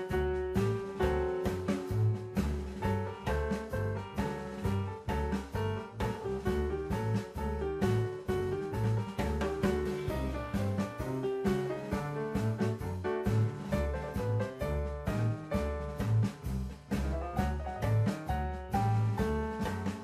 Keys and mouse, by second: 2.6 s, 2.9 x, 3.5 click, 4.1 Tab, 4.4 click, 5.0 Tab, 6.8 s, 7.0 x, 8.2 click, 8.8 KP_0, 10.5 Tab, 13.8 click, 14.9 middle click, 15.1 click, 16.0 click, 17.2 ctrl+t, 18.2 middle click, 18.6-19.4 drag, 19.6 click.